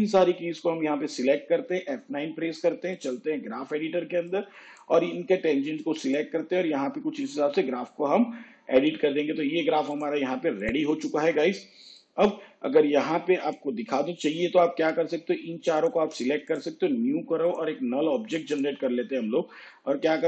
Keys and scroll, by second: 2.0 F9.